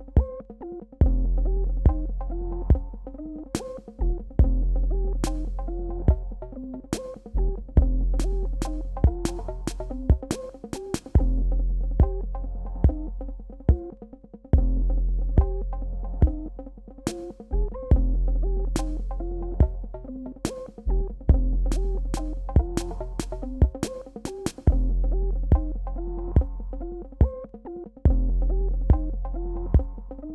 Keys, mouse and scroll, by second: 0.8 Delete, 1.9-12.7 drag.